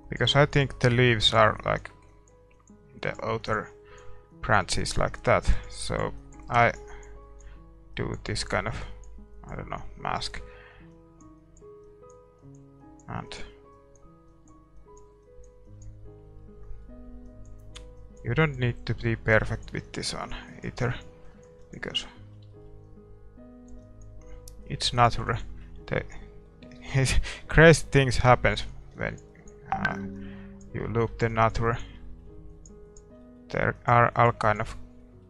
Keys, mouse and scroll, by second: 9.8-11.5 middle drag, 11.8 middle click, 16.4-18.2 middle drag, 19.1-20.8 middle drag, 21.9-24.6 middle drag, 25.6-31.0 middle drag, 28.9-35.2 drag, 32.0-35.2 middle drag.